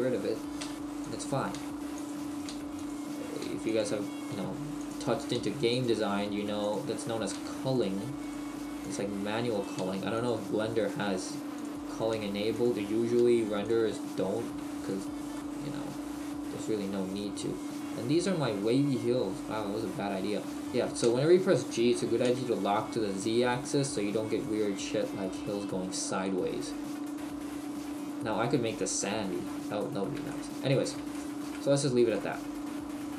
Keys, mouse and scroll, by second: 0.6 g, 1.1 click, 1.4 right click, 2.1 click, 2.4 right click, 2.5 g, 2.9 click, 3.3 right click, 3.4 g, 3.8 click, 4.1 right click, 4.4 g, 5.2 right click, 5.4 g, 5.9 click, 6.1 right click, 6.3 g, 7.2 right click, 7.4 g, 7.8 click, 8.2 right click, 8.9 click, 8.9 g, 9.5 right click, 9.8 g, 10.3 click, 10.8 right click, 11.0 g, 11.6 click, 11.9 right click, 12.6 click, 12.6 g, 12.9 right click, 13.2 g, 13.7 click, 14.3 right click, 14.5 g, 15.0 click, 15.4 middle click, 18.1-18.5 scroll down 1, 18.6 middle click, 20.5 right click, 21.0 g, 24.0 click, 26.2 middle click, 29.5 middle click, 30.3 shift+middle click, 31.5 Tab, 31.5 middle click, 32.1 middle click.